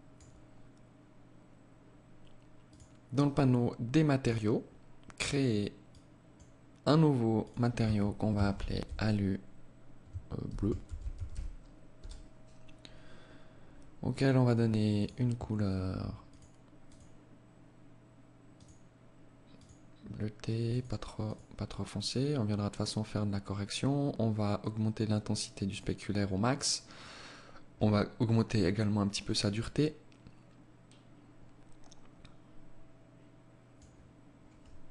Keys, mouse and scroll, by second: 3.2 click, 4.9 click, 6.5 click, 12.5 scroll down 3, 14.0 click, 22.5-23.6 scroll down 1, 23.6 click, 23.6-24.1 scroll down 1, 26.1 click, 34.7 ctrl+s.